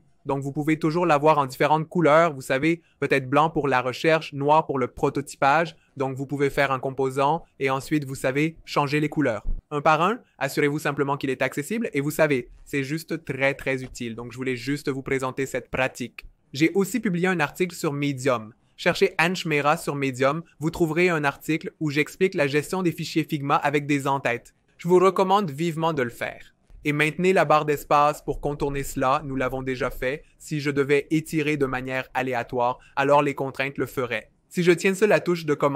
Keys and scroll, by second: 10.9 f, 11.2 Return, 14.9 BackSpace, 29.6 v, 33.5 super+z.